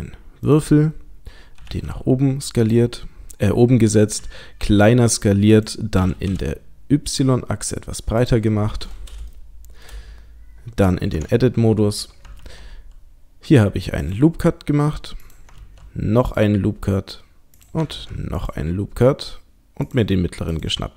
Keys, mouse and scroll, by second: 1.6 g, 2.7 click, 4.2 s, 5.9 s, 8.5 middle click, 9.3 shift+middle click, 10.0-10.9 scroll up 3, 11.1 Tab, 12.4 ctrl+r, 15.6 ctrl+r, 17.9 ctrl+r, 20.5 click.